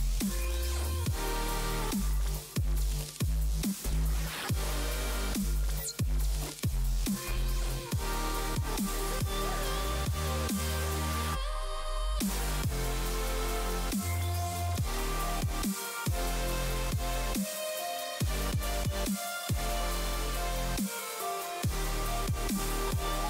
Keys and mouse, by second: 3.0 click, 4.2 click, 5.1 click, 7.9 click, 10.4 click, 13.0 x, 13.1 click, 13.3 click, 13.5 space, 13.9 x, 14.4 click, 14.6 x, 14.7 click, 15.2 click, 16.1 click, 16.4 x, 16.5 click, 16.8 click, 17.1 x, 17.6 click, 18.1 x, 18.8 click, 19.0 click, 20.1 x, 20.3 click, 21.3 click, 21.6 space, 21.7 click, 22.6 ctrl+z.